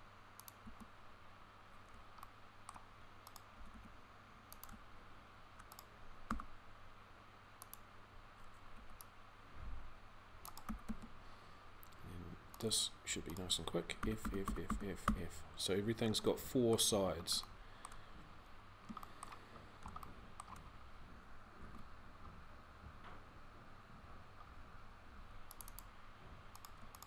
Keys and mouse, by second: 0.5 a, 3.4 g, 6.0 e, 8.6 c, 10.5 f, 10.6 a, 13.7 f, 14.0-16.2 f, 16.2 middle click, 19.7 click, 20.0-21.4 middle drag, 21.4 ctrl+r.